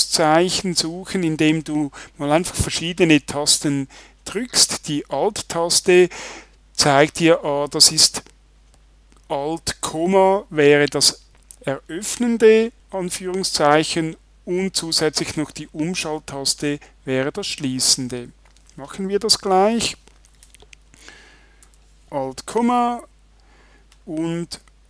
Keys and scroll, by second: 21.6 alt+,.